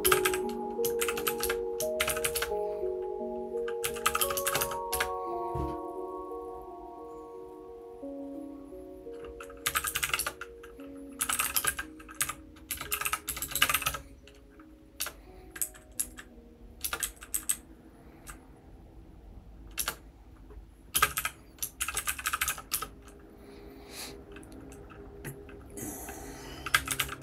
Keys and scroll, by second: 0.0-1.9 typing, 15.9 Down, 16.8 Return, 17.0 Down, 17.3 Down, 17.5-18.2 Down, 19.9 Return, 20.9 space, 21.0 e, 21.1 e.